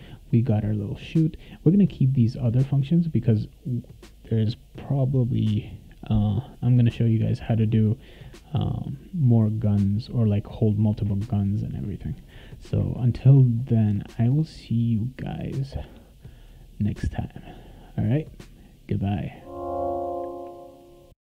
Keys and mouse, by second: 5.9-7.3 drag, 8.8-10.3 drag.